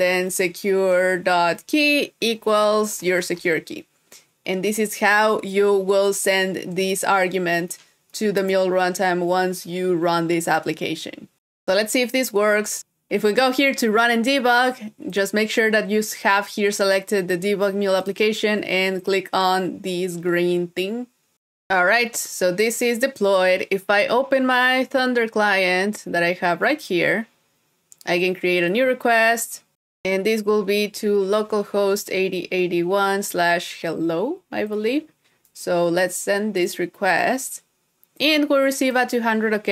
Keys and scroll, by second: 12.4 super+s.